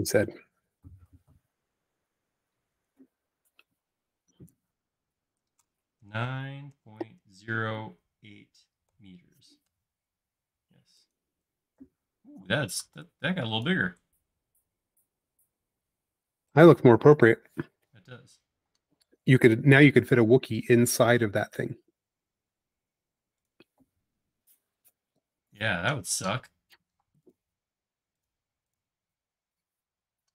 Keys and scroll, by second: 6.1-8.9 typing, 9.7 Return, 12.2 e, 18.8 space, 20.6 m, 23.9 space, 27.0 m, 28.6 space.